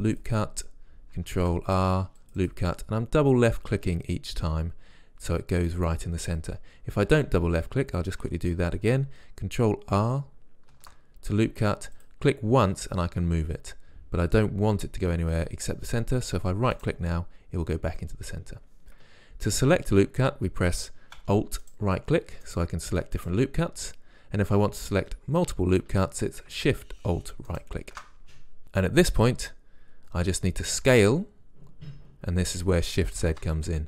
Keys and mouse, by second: 1.3 ctrl+r, 7.0 ctrl+z, 10.6 ctrl+r, 27.5-28.6 drag, 30.9 s.